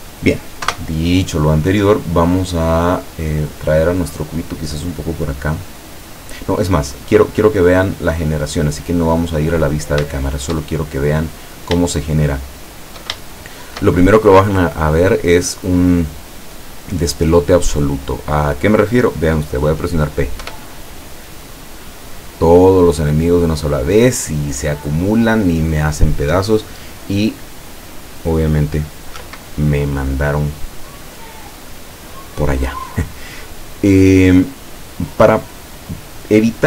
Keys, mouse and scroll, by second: 0.7 KP_0, 2.5 right click, 3.9-5.5 drag, 6.0 scroll down 1, 6.5-7.2 middle drag, 7.2 scroll down 1, 7.5-8.3 middle drag, 8.3 scroll down 1, 8.6-9.3 middle drag, 10.1-11.0 shift+middle drag, 11.0-11.7 shift+scroll up 2, 11.2 middle click, 11.9-12.6 shift+middle drag, 12.8 shift+middle click, 13.3-14.0 shift+middle drag, 20.5 p, 29.3 Escape.